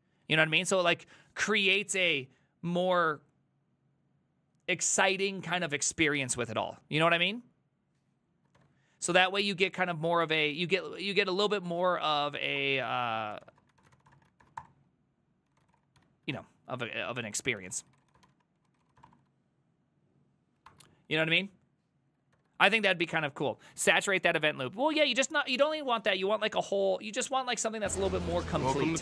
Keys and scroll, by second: 8.6 alt+f, 11.3 alt+{, 11.5-19.5 typing, 20.7 alt++, 22.1-22.9 typing.